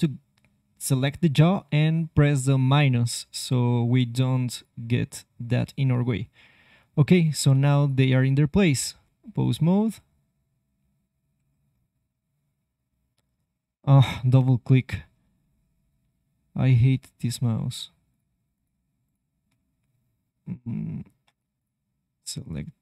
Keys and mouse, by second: 4.4-6.6 drag, 7.0 click, 8.4 ctrl+Tab, 9.7 r, 14.5 ctrl+z, 14.8 ctrl+z, 15.3 ctrl+z, 16.1 ctrl+z, 17.0 ctrl+z, 18.0-21.0 drag, 19.5 ctrl+Tab, 21.5-22.8 drag.